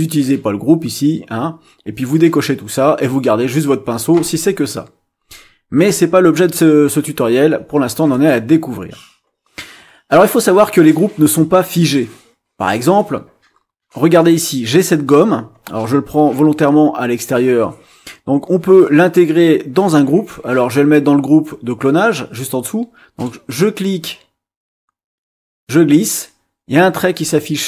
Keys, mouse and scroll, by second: 8.1 click, 20.3-23.4 drag, 23.7-27.6 drag.